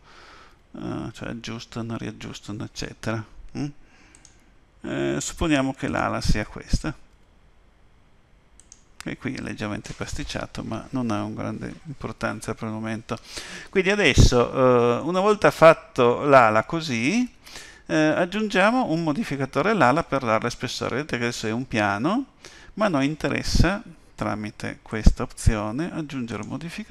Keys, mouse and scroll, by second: 0.5 g, 5.8 click, 7.1 g, 15.0 middle click, 20.8 middle click, 24.9 click, 26.3 click.